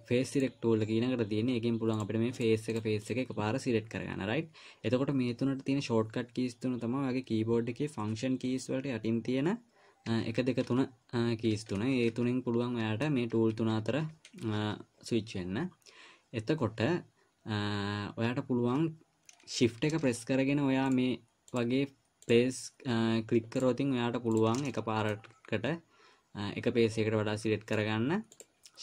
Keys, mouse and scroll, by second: 2.3 click, 2.8 click, 3.4 click, 10.5 1, 10.8 2, 11.9-15.0 typing, 21.2-24.9 shift+click, 25.0 middle click, 28.1 click, 28.7 click.